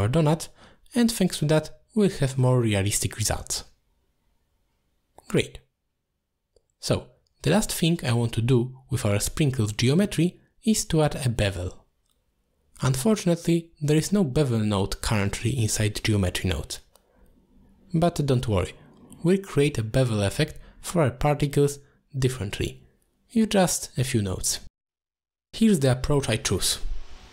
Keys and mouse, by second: 0.0-1.3 typing, 2.1 click, 2.8 middle click, 6.6 middle click, 7.1 shift+middle drag, 7.5 middle drag, 8.1 shift+middle drag, 8.6 shift+b, 10.6 middle drag, 10.9 middle drag, 12.4 shift+middle drag, 14.8 middle click, 18.4 middle click, 19.8 drag, 20.5 g, 21.6 click, 22.4 shift+right click, 22.9 g, 24.1 click, 24.6 ctrl+x, 25.8 click, 26.9 click.